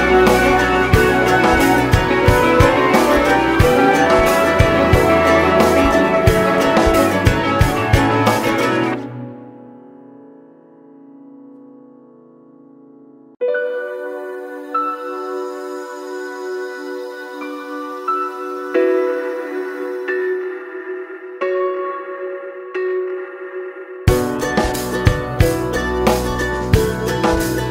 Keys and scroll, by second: 21.8 ctrl+space.